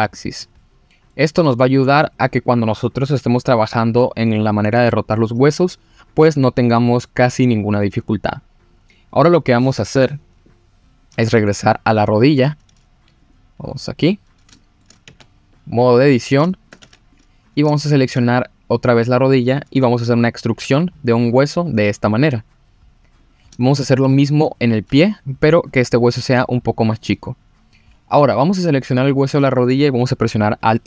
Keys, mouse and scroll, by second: 0.7-1.1 scroll down 2, 1.1 middle click, 12.4 click, 13.2 click, 14.0-14.5 scroll up 2, 14.6 shift+middle click, 15.0 Tab, 15.2-16.0 scroll up 2, 16.0 click, 16.5 shift+middle drag, 16.8 Tab, 17.1 click, 17.4 scroll up 1, 17.8 shift+middle click, 19.6 scroll down 1, 20.6 e, 23.2 click, 23.6 shift+middle click, 24.5 click, 24.9 e, 26.9 click, 28.4 click.